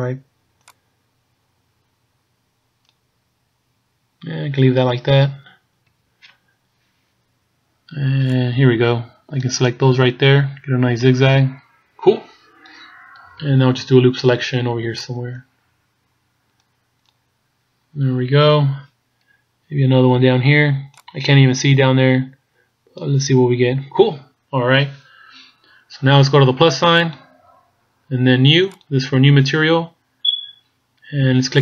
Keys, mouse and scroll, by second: 5.9 b, 13.4 b, 18.2-18.6 scroll down 2, 19.7 b, 27.0 click, 28.7 click.